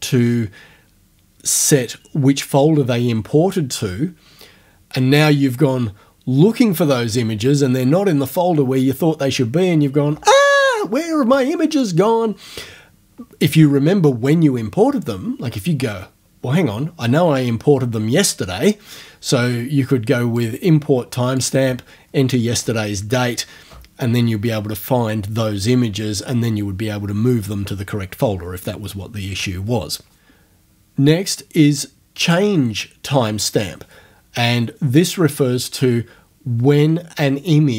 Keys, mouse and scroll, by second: 20.4 click, 21.4 click.